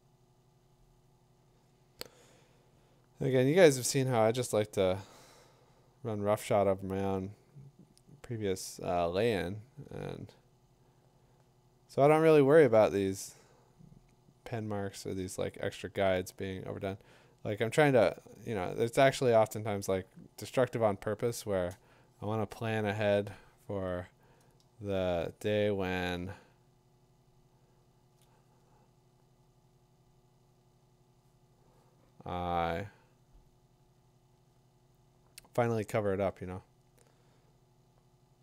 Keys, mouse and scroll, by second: 23.0-23.6 click, 24.0 click, 25.0 click, 25.1 click, 25.2 click, 25.4 click, 25.5 click, 25.6 click, 25.6-28.1 click, 26.6 click, 28.2 click, 29.5 click.